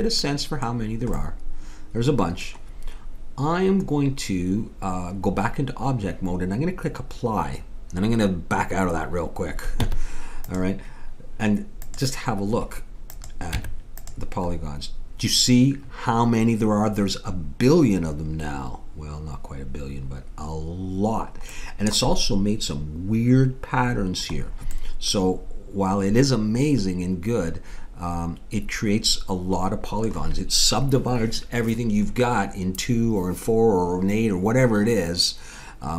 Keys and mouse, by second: 9.8 Tab, 12.0-13.6 drag, 13.6 Tab, 21.6-26.2 middle drag.